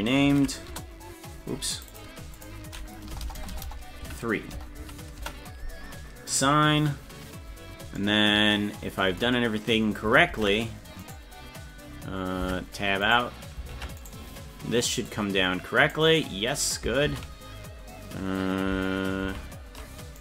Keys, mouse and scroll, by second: 1.8 click, 2.7-5.8 drag, 3.2 BackSpace, 3.3 BackSpace, 3.7 BackSpace, 6.3 click, 10.3 ctrl+Tab, 12.4 Tab, 13.1 right click, 13.8 ctrl+Tab, 14.1 right click, 15.1 click, 17.1 ctrl+x, 19.3 ctrl+z.